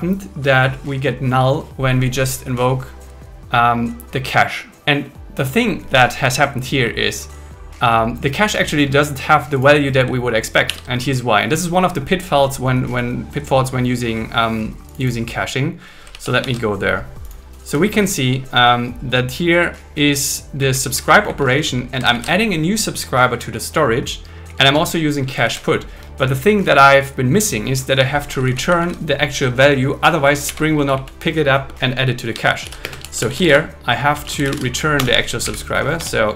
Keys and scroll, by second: 10.7 super+1, 16.1 super+1, 20.6 Up, 21.3 Down, 22.1 shift+super+Left, 24.4 Up, 25.2 Left, 28.3 Down, 28.8 super+Right, 30.6 Up, 30.8 Left, 32.6 shift+;, 32.8 space, 33.0 shift+s, 35.0 Return, 35.4 Down, 36.0 Return.